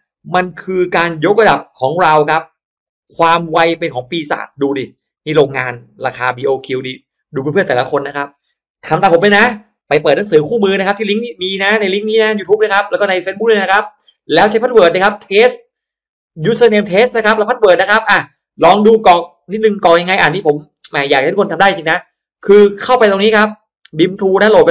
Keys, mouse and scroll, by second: 1.3 click, 2.6 click, 5.0 click, 5.8 click, 6.4 click, 6.8 click, 9.9 click, 11.0 click, 12.3 click, 13.2 click, 21.2 click, 22.8 click, 24.1 click.